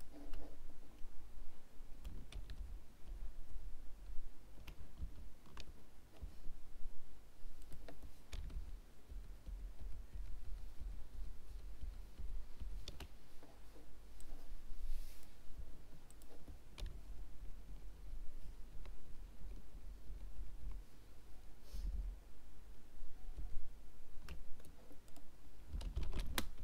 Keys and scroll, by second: 5.0 ctrl+z, 26.1 alt+r.